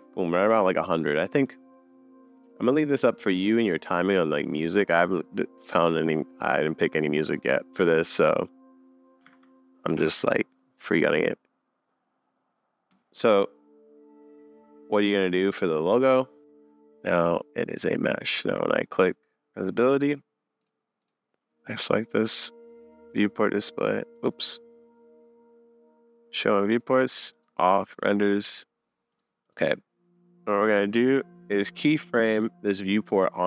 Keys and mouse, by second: 1.4-3.1 middle drag, 5.3-7.8 drag, 9.3 super+s, 15.4 click, 16.4 super+j, 16.4 super+s, 20.6 click, 24.1 click, 26.6 click, 27.3 click, 27.9 click, 28.3 middle click, 29.1 middle click, 29.4-33.4 middle drag.